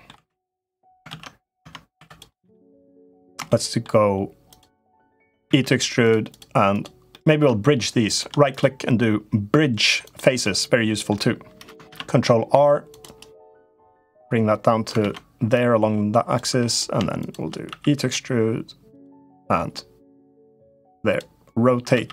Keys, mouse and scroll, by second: 0.9 ctrl+z, 1.4 Tab, 1.7 3, 1.8 click, 2.2 middle click, 2.5 middle click, 3.2 shift+middle click, 4.3 shift+click, 4.6 middle click, 5.2 e, 6.5 click, 6.8-8.0 middle drag, 7.9 shift+click, 8.4-9.9 right drag, 10.3 middle click, 11.6 ctrl+r, 13.8 click, 14.8 ctrl+z, 15.3 click, 16.3 3, 16.4 click, 16.9 shift+click, 17.4 e, 19.1 middle click, 20.2 click, 21.7 e.